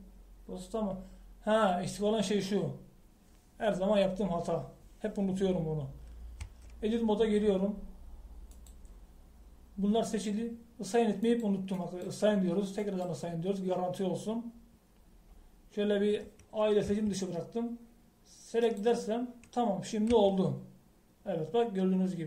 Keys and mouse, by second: 7.5 Tab, 9.6-11.5 drag, 12.3-17.0 drag, 17.9 a, 19.7-21.1 drag, 21.2 Tab.